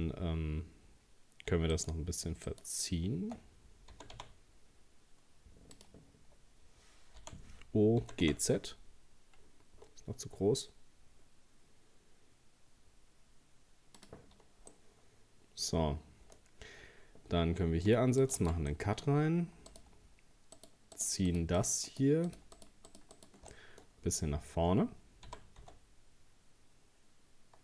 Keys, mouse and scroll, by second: 1.7 shift+right click, 2.5 shift+right click, 3.9 g, 7.2 o, 8.0 g, 14.3-14.7 scroll down 2, 14.7-16.4 middle drag, 16.4-16.9 scroll up 2, 17.9 ctrl+r, 18.7-19.7 middle drag, 19.7 right click, 20.6 shift+right click, 21.0 shift+right click, 21.3 shift+right click, 21.6 shift+right click, 21.9 shift+right click, 22.3 shift+right click, 22.6 shift+right click, 22.9 shift+right click, 23.1 shift+right click, 23.5 middle click, 24.1-24.5 scroll down 2, 24.5-25.2 scroll up 1, 25.3 g.